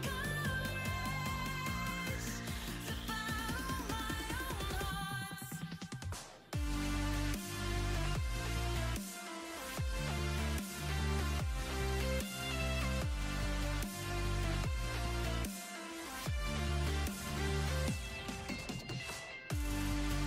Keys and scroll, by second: 7.4 shift+0.